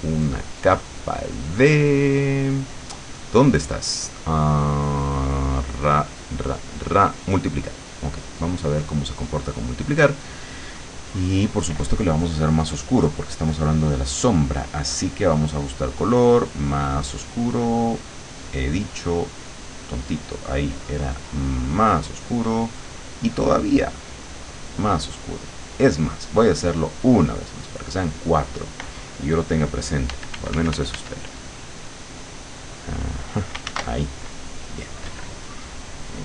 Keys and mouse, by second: 8.8 click, 13.3-16.3 drag, 16.9 click, 18.1 click, 18.5 click, 19.4 click, 19.8 click, 21.7 click, 22.9 click, 24.7 click, 26.2 click, 27.7 click, 30.2 f, 31.2-33.1 drag, 33.7 ctrl+z.